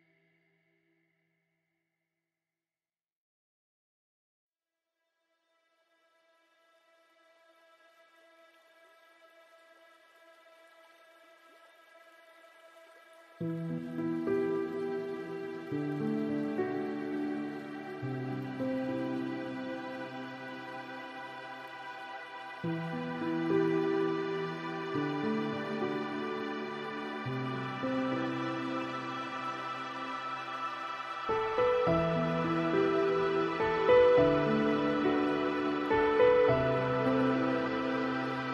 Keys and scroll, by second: 1.6 ctrl+z, 5.8 ctrl+space.